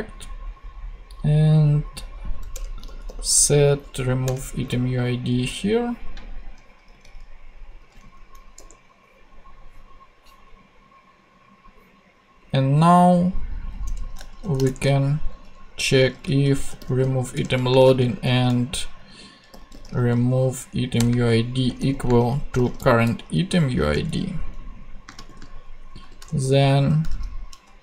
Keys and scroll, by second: 2.5 Return, 2.8 s, 4.2 Return, 6.9 super+c, 7.9 super+v, 8.1 super+Right, 8.5 ;, 13.8 Return, 14.4 shift+[, 14.6 shift+Return, 15.6 Return, 16.0-24.1 typing, 20.7 Down, 20.9 Return, 25.2 shift+/, 26.0 shift+9, 26.2 shift+Return, 27.1 shift+,.